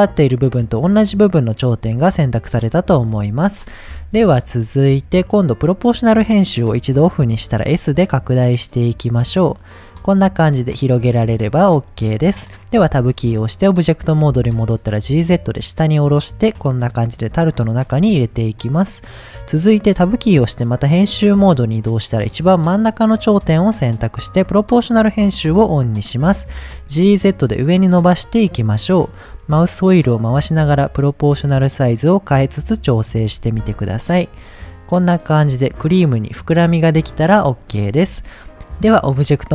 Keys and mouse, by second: 5.7 click, 7.3 s, 9.3 click, 11.0 middle click, 12.8 Tab, 14.2 g, 14.4 z, 16.6 drag, 18.0-18.6 middle drag, 20.0 Tab, 21.1 click, 21.4 middle click, 24.4 click, 25.9 middle click, 26.7 g, 27.1 z, 33.1 click, 33.5 Tab, 33.9-34.3 middle drag, 34.4-34.8 middle drag, 35.1 middle click, 37.2-37.5 middle drag, 38.3 shift+middle drag, 38.9 click.